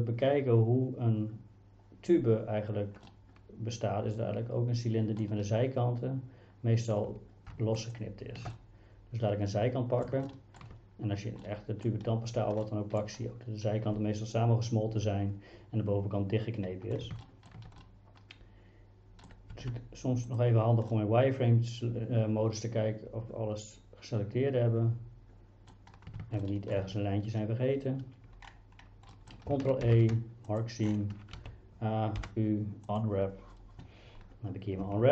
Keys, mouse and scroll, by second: 3.1-5.2 middle drag, 7.5 shift+a, 7.8 click, 8.6-10.1 middle drag, 10.3 shift+middle click, 11.4 middle click, 12.7 middle click, 17.3 shift+middle click, 17.8-19.3 middle drag, 19.5 z, 20.9-25.7 middle drag, 26.4 shift+middle click, 29.2 middle click, 29.9 ctrl+e, 31.4 a, 32.2 u.